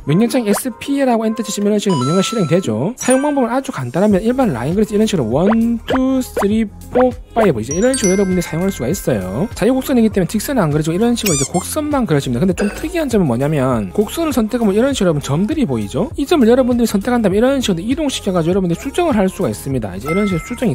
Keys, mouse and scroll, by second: 0.6 s, 1.8 right click, 5.4 click, 6.0 click, 6.6 click, 7.1 click, 7.5 click, 11.3 scroll up 2, 11.6 middle click, 14.9 click, 17.3 click, 18.1 click, 18.9 click, 19.3 click, 20.3 click.